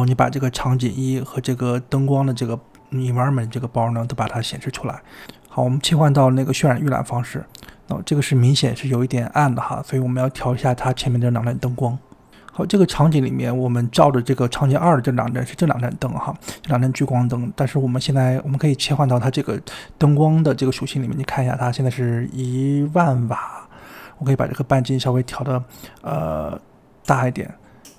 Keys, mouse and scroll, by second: 0.0-2.1 typing, 1.0 click, 1.3 scroll down 3, 1.8 shift+middle drag, 1.8 scroll up 7, 1.9 scroll down 1, 2.0 click, 2.2 click, 3.3-4.5 drag, 7.2 click, 12.3 click, 12.8 click, 13.1 click, 14.0 click, 14.2 scroll down 4, 14.4-14.8 middle drag, 14.8 KP_7, 15.2 click, 15.7-17.3 middle drag, 17.4-18.0 middle drag, 18.7 scroll down 2, 18.9 click, 22.1-25.1 drag, 25.9-27.8 drag, 27.8 g.